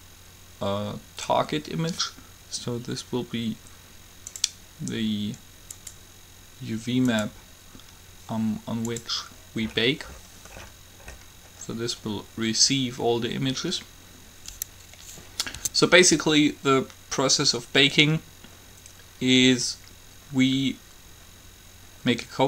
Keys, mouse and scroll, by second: 9.8-13.6 middle drag, 15.7 Tab.